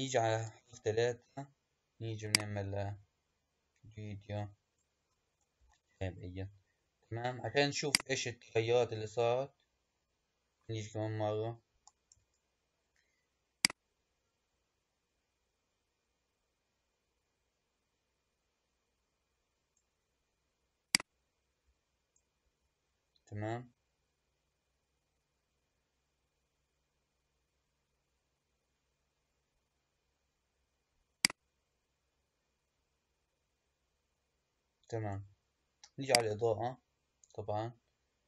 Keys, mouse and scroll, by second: 0.2 KP_3, 2.1 click, 5.5 KP_1, 8.0 click, 12.0 KP_3, 13.5 click, 20.8 click, 31.1-34.2 drag, 36.0 click.